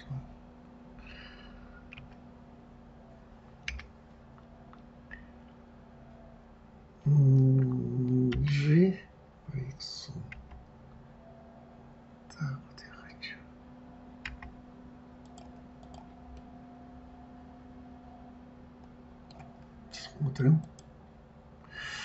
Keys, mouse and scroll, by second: 0.0 click, 2.3 s, 8.7 g, 16.2 click, 16.7-19.7 middle drag.